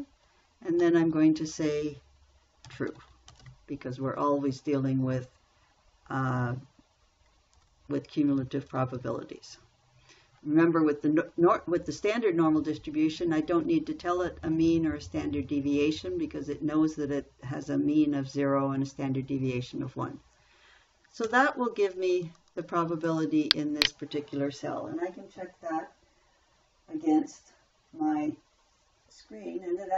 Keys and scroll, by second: 1.2 ,, 2.9-4.4 typing, 8.0 shift+0, 21.7 Return.